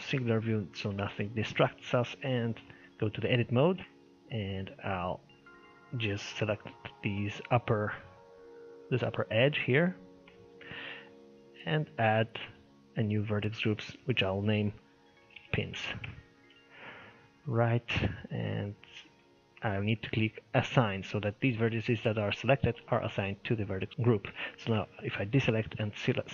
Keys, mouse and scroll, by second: 0.1 shift+middle click, 0.5-0.9 scroll down 4, 0.9 shift+middle click, 1.2-1.5 scroll up 3, 1.5 shift+middle click, 2.2 Tab, 2.7 shift+middle click, 3.1 scroll up 2, 3.8-5.2 shift+middle drag, 5.3 alt+click, 6.4-8.0 shift+middle drag, 8.0-8.7 scroll up 2, 8.7 scroll up 1, 8.7-9.9 middle drag, 9.9-10.3 scroll down 1, 10.3-12.3 shift+middle drag, 12.3-16.9 drag, 18.7-19.2 scroll down 1, 19.2-22.2 middle drag, 22.6 click, 23.8 scroll up 1, 23.9 scroll down 2, 24.2 alt+a, 25.7 click.